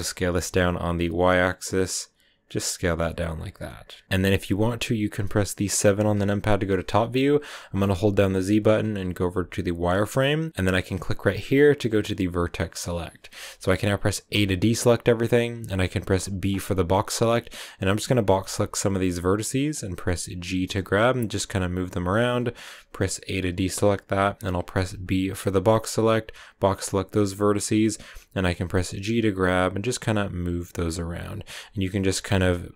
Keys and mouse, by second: 0.2 y, 3.1 Tab, 3.3 click, 3.4 Tab, 3.6 click, 4.0 Tab, 7.9 KP_7, 7.9 z, 11.1 click, 13.9 a, 14.7 a, 15.5 b, 18.2 g, 20.7 click, 24.4 a, 24.6 b, 27.8 g, 30.5 click, 32.1-32.7 typing.